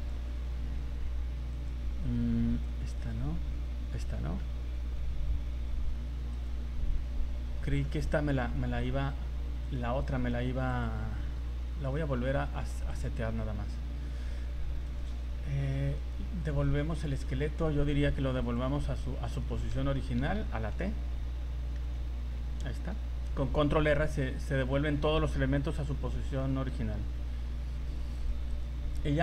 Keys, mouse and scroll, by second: 1.0 right click, 1.5 click, 3.1 right click, 4.1-4.9 scroll down 12, 6.4 right click, 7.2-7.7 scroll up 8, 7.8-8.3 scroll down 7, 8.8 scroll up 2, 9.7 right click, 10.7 click, 11.9 shift+right click, 12.9 click, 14.9 right click, 16.0 right click, 16.7 right click, 17.2 right click, 18.4 click, 19.8 a, 20.2 a, 20.5 scroll down 2, 21.8 alt+r, 22.3 scroll down 3, 22.6 middle click, 24.6 scroll up 4, 26.4 middle click, 26.8 scroll up 1, 27.1 scroll down 2, 28.1 right click, 28.6 right click.